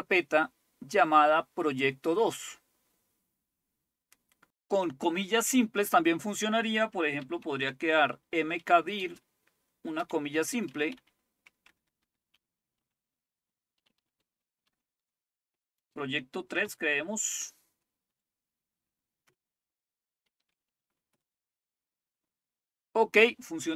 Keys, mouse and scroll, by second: 7.0-16.6 typing, 18.1 typing, 19.3 Return, 20.3-21.4 typing.